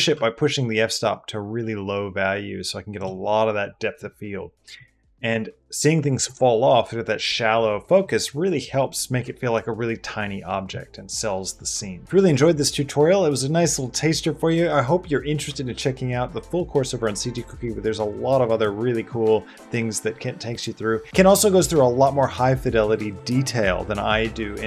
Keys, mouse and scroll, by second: 0.1-2.6 shift+middle drag.